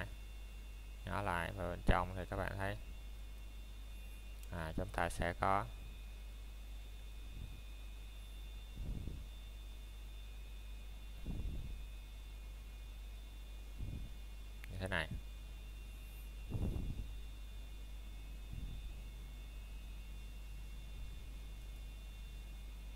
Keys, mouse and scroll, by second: 1.8 middle click, 3.1-3.7 scroll down 1, 3.9 alt+s, 5.4 Escape, 6.1 o, 8.7 o, 8.8 alt+s, 13.7 click, 14.0 scroll down 1, 14.2 middle click, 14.8 shift+middle click, 15.1-15.4 scroll up 1, 15.6 middle click, 16.2-16.6 scroll down 1, 16.6 middle click, 16.9-17.5 scroll up 1, 18.1 middle click, 18.5-19.0 scroll up 1, 19.0 middle click, 21.1-21.5 scroll down 1, 21.5 middle click, 21.9 scroll up 1.